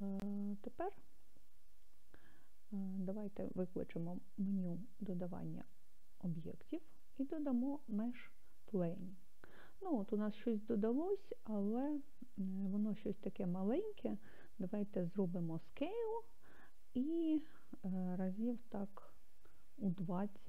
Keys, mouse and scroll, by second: 4.8 shift+a, 15.9 s, 19.5 2.